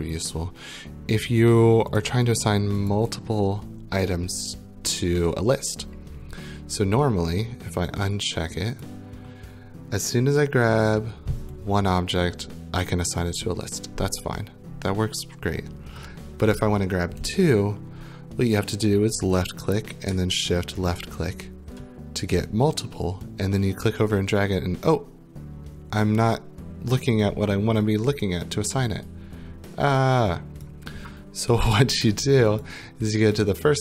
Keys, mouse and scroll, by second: 0.1 click, 1.0-1.8 scroll, 2.0 click, 2.3 click, 3.0 click, 8.1 right click, 8.8 click, 13.2 click, 19.4 click, 20.9 shift+click, 30.6 click, 32.6 click.